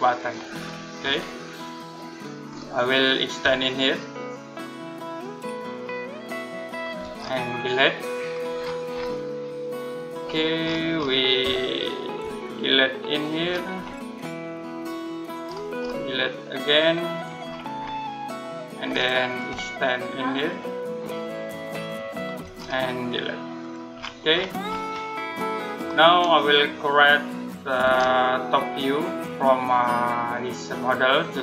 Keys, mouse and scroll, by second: 0.0 click, 0.4-1.4 scroll down 1, 1.4 middle click, 2.2-3.2 scroll up 1, 4.3 shift+click, 5.5 shift+click, 6.5 click, 7.0-8.0 scroll up 1, 8.0 click, 8.4-9.0 scroll down 1, 9.0 middle click, 10.0-11.0 scroll up 1, 12.4 click, 13.2-13.8 scroll down 1, 15.2-16.3 scroll up 1, 16.4 click, 17.2-17.9 scroll down 1, 17.9 middle click, 18.6-19.3 scroll up 1, 20.3 shift+click, 21.4 shift+click, 22.4-23.4 scroll up 1, 23.4 click, 23.8-24.8 scroll down 1, 24.8 middle click, 25.5-27.0 scroll up 1, 27.6 space, 28.3-28.9 scroll down 1, 28.9 middle click.